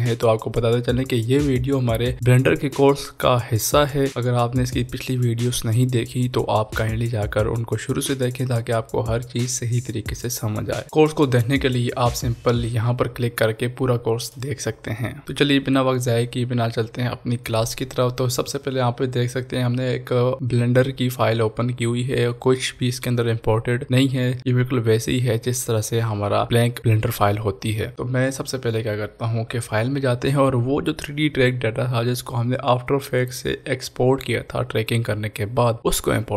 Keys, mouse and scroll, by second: 0.2 click, 0.4 scroll down 1, 0.5 click, 0.6 click, 0.7 ctrl+s, 0.7 click, 1.1 click, 1.2 click, 1.4 shift+middle click, 1.5 shift+a, 1.6 click, 1.8 click, 1.9 ctrl+p, 2.0 click, 2.1 middle click, 2.2 click, 2.3 click, 2.5 middle click, 2.6 scroll up 1, 2.6 shift+click, 2.8 middle click, 2.9 shift+click, 3.0 middle click, 3.0 scroll down 1, 3.1 middle click, 3.2 s, 3.2 click, 3.5 click, 3.8 scroll down 1, 3.9 click, 4.1 ctrl+z, 4.2 click, 4.2 scroll up 1, 4.3 shift+middle click, 4.4 click, 4.5 shift+click, 4.6 ctrl+p, 4.6 click, 4.7 ctrl+p, 4.8 scroll down 1, 4.9 middle click, 4.9 click, 5.1 middle click, 5.2 click, 5.7 middle click, 5.8 shift+click, 6.0 middle click, 6.1 shift+click, 6.3 ctrl+s, 6.3 click, 6.4 scroll down 1, 6.5 click, 6.7 click, 6.8 ctrl+s, 6.8 click, 7.0 click, 7.1 click, 7.3 click, 7.7 middle click, 7.8 ctrl+s, 7.8 click, 7.9 middle click, 8.0 click, 8.1 shift+click, 8.3 scroll up 1, 8.3 shift+click, 8.5 shift+middle click, 8.5 click, 8.6 middle click, 8.7 shift+scroll down 1, 8.8 middle click, 8.8 shift+click, 9.1 middle click, 9.1 click, 9.3 click, 9.4 scroll down 1, 9.5 click, 9.6 middle click, 9.7 click, 9.8 click, 10.0 middle click, 10.1 click, 10.2 shift+a, 10.3 Return, 10.3 click, 10.4 ctrl+s, 10.5 click, 10.7 click.